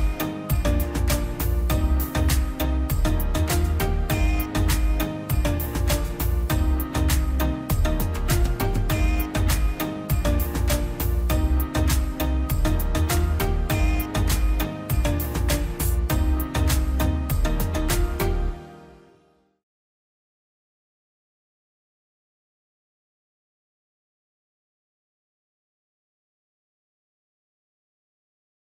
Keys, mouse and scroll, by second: 0.7 click, 7.8 click, 11.7 click.